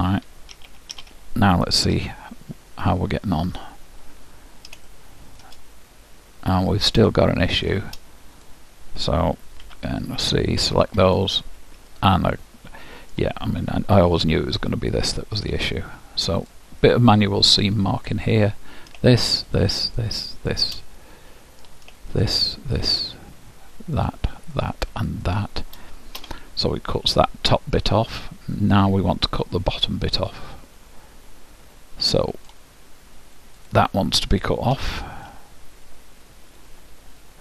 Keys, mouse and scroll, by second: 0.7 a, 1.0 a, 2.1 u, 4.2-8.6 middle drag, 8.6-10.4 drag, 9.8 c, 12.0 middle click, 14.0 KP_Decimal, 16.5 middle click, 16.6-27.1 drag, 17.0-18.8 middle drag, 21.0 middle click, 27.1-28.8 middle drag, 33.8-35.6 drag, 35.4-37.2 middle drag.